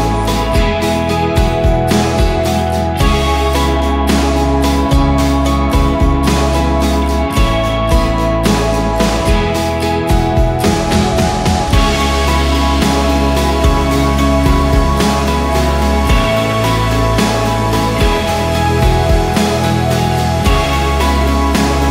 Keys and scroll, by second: 3.7 1, 3.9 3, 4.2 Return, 4.9 F4, 7.6 F2, 8.5 Escape, 9.7 e, 11.6 alt+c, 11.7 alt+w, 12.4 p, 21.0 Escape, 21.5 F3.